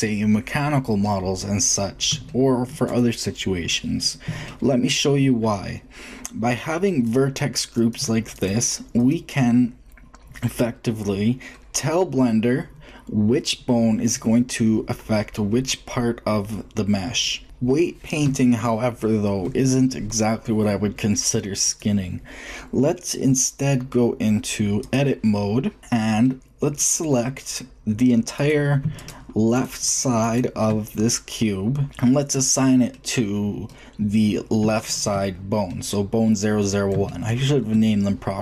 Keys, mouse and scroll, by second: 1.0-3.9 middle drag, 6.4 shift+middle click, 26.0-28.0 middle drag, 28.2-31.1 drag, 31.1-32.7 shift+middle drag.